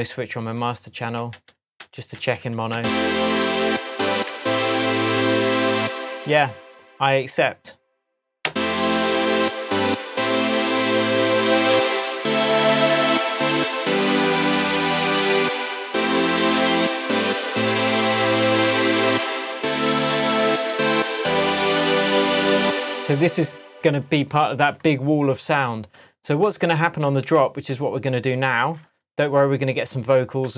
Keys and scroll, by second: 1.3 alt+m, 2.7 alt+space, 4.2 alt+m, 5.7 space, 8.4 space, 14.6 Tab, 21.3 Tab, 22.6 space, 22.8 super+s.